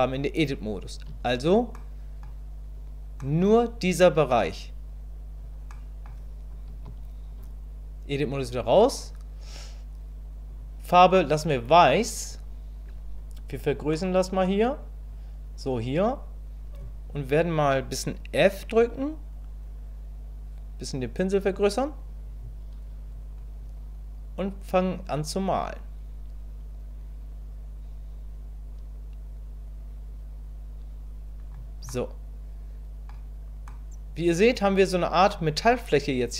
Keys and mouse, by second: 1.1 Tab, 1.7 click, 3.2 click, 5.7 middle click, 6.7 KP_1, 7.4 Tab, 13.9 click, 25.1-31.5 drag, 31.9-33.1 drag, 33.7-36.3 middle drag.